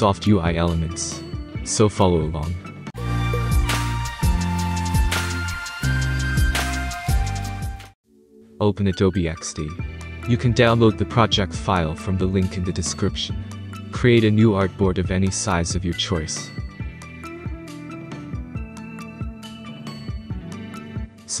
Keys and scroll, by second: 1.6 ctrl+z, 2.2 ctrl+g, 2.3-3.1 typing, 8.7 Return, 19.5 space.